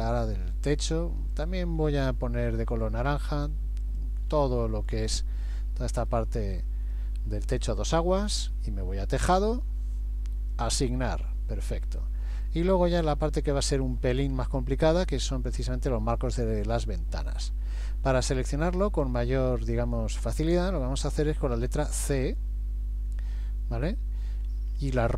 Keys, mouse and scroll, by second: 0.8 shift+click, 1.4 shift+click, 1.9 middle click, 3.4 shift+click, 3.9 shift+click, 4.5 middle click, 6.5 shift+middle click, 9.2 click, 10.5 click, 12.0 middle click, 13.2 scroll down 1, 13.7 shift+middle click, 14.3 scroll up 1, 15.0 scroll up 1, 15.1 middle click, 16.9 middle click, 17.8 middle click, 19.0-20.4 scroll up 1, 21.9 c.